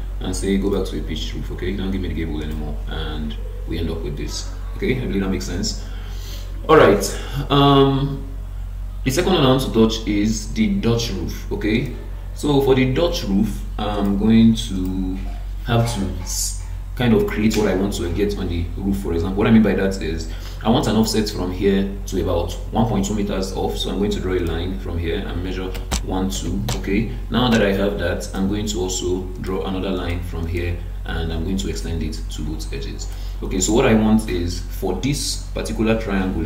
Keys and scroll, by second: 26.7 Return.